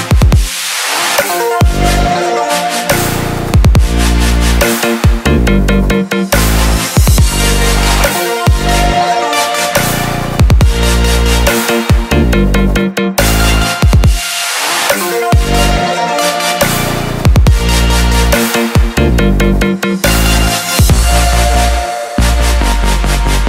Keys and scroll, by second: 9.0 ctrl+j, 15.6 ctrl+t.